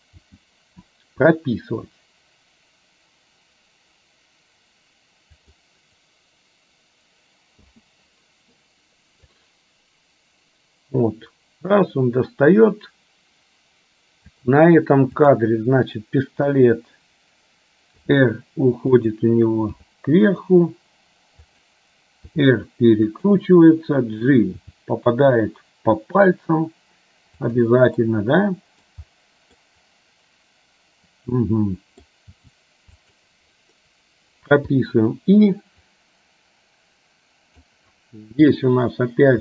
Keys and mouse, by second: 0.3 g, 9.5-14.5 drag, 16.5 KP_1, 18.0 r, 19.8 g, 22.4 r, 24.7 g, 28.2 middle click, 29.7-32.2 middle drag, 32.4 g, 34.8 i, 36.0-37.8 drag.